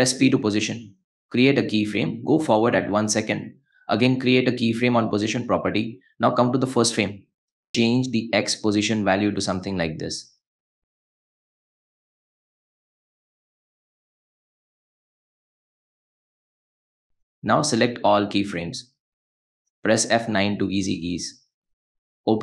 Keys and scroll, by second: 11.5 space, 20.0 F9.